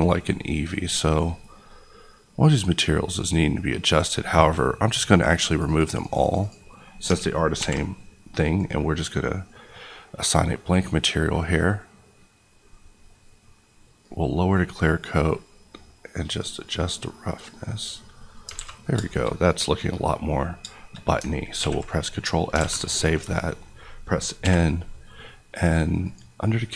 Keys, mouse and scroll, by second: 3.0-3.8 scroll down 1, 3.8-5.1 scroll up 1, 5.1 click, 5.8 click, 6.3 click, 7.5 alt+m, 8.4 click, 9.2 middle click, 12.8-14.0 scroll down 1, 14.0-17.9 drag, 18.2 middle click, 18.5 alt+a, 18.7-19.0 scroll down 2, 19.0 shift+middle click, 20.3-20.7 scroll up 2, 20.7 shift+middle click, 21.5 ctrl+s, 22.5 alt+s, 22.7 a, 22.8 click, 23.2-24.4 scroll up 1, 24.4 n, 26.0 click.